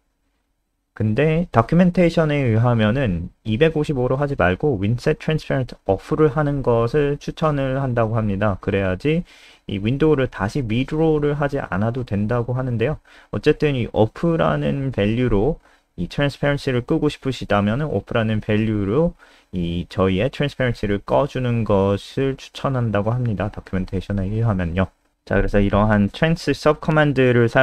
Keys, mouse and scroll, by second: 2.5 Home, 2.8 ;, 3.2 Down, 3.7 BackSpace, 4.0 ctrl+s, 5.7 click, 10.8 click, 11.4 F5, 20.0 click, 20.6-21.6 scroll down 1, 22.5 click.